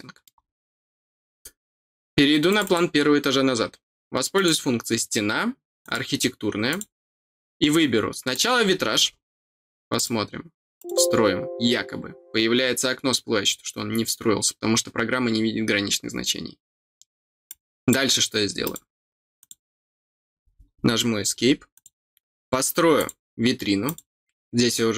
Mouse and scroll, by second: 2.4 click, 4.3 click, 5.8 click, 6.6 click, 8.3 click, 8.7 middle click, 8.7-9.0 scroll down 2, 9.0 middle click, 9.9 click, 10.7 click, 17.4 click, 18.6 click, 19.3 click, 21.7 click, 22.9 click, 23.8 click.